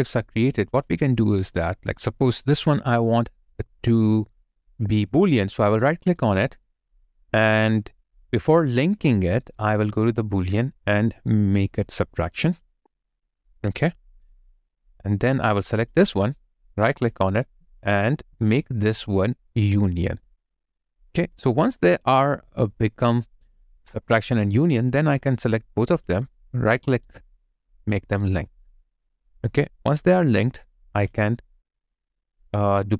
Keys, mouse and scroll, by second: 6.2 right click, 16.3 right click, 25.9 shift+click, 26.9 right click, 31.1 alt+click.